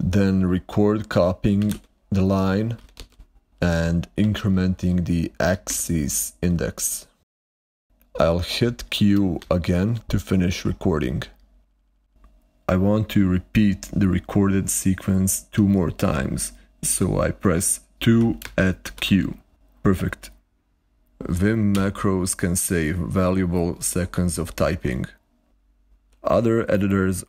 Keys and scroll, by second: 1.0-3.4 typing, 9.4 ctrl+q, 18.0-19.4 typing, 21.6 typing.